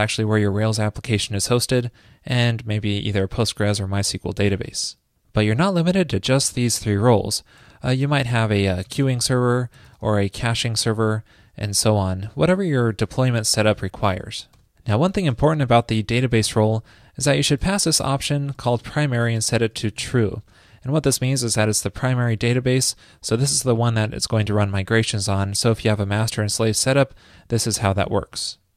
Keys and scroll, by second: 13.1 alt+shift+Left, 13.2 alt+shift+Left, 15.6 alt+shift+Left, 21.5 alt+shift+Left, 21.6 alt+shift+Left, 27.9 super+Right, 28.0 super+s.